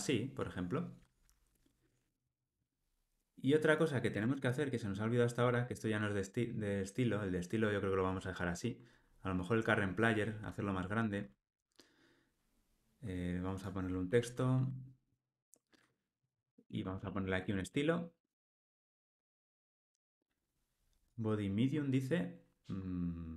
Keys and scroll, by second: 2.1 alt+super+l, 4.1 alt+Return, 14.1 alt+Return, 18.4 Return, 19.5 Tab.